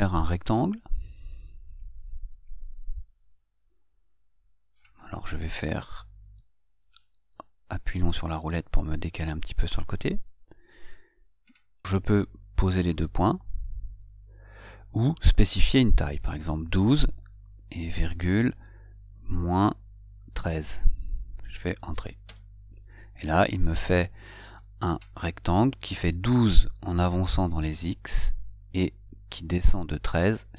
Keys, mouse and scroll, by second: 3.0 click, 6.7-9.9 middle drag, 13.3 click, 22.6 Return.